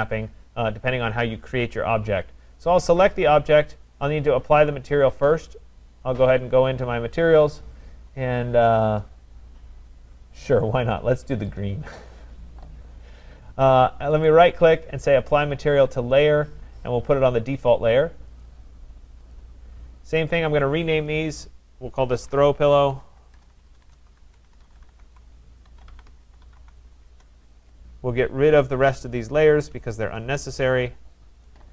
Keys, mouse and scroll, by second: 3.0 click, 5.5 click, 7.4-10.5 scroll, 12.1 click, 14.2 click, 14.3 right click, 17.3 click, 18.4 click, 19.5 click, 20.3 click, 20.5 click, 21.3 click, 22.0-27.1 typing, 27.1 Return, 28.6 click, 28.6 typing, 29.4 shift+click, 30.2 click.